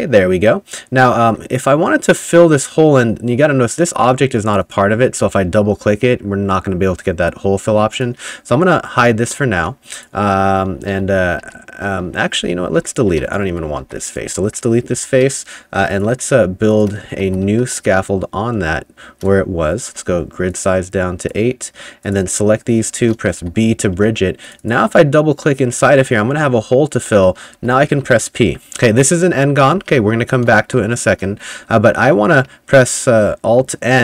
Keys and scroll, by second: 1.3 2, 7.7 3, 9.1-11.5 typing, 12.4 ctrl+z, 12.8 ctrl+z, 13.8 3, 15.0 Delete, 15.8-18.0 typing, 19.9 [, 23.4 b, 24.0 2, 27.6 p, 28.8-31.9 typing.